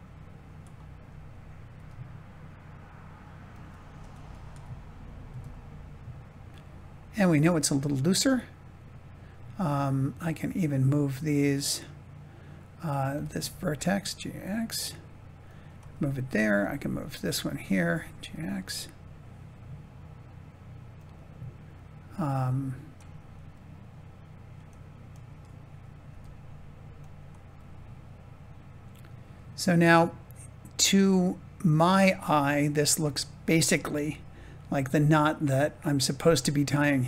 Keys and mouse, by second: 1.6 g, 3.9 Tab, 4.4 a, 5.2 s, 7.7-9.6 middle drag, 10.4 click, 13.0 g, 15.3 click, 15.9 middle click, 17.0 click, 17.8 g, 18.2 x, 20.9 click, 22.4 click, 23.4 middle click, 25.0 click, 26.0 g, 26.9 click, 27.6-30.7 middle drag, 33.1 shift+middle click, 33.9-36.4 middle drag.